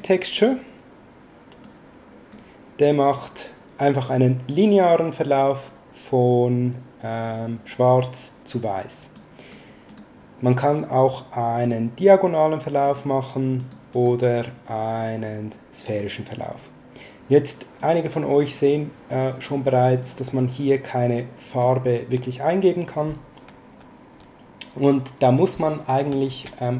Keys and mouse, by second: 1.6 click, 9.1 click, 11.6 click, 12.8 click, 15.8 click, 17.8 click, 19.0 click, 21.1 click, 26.3 shift+a.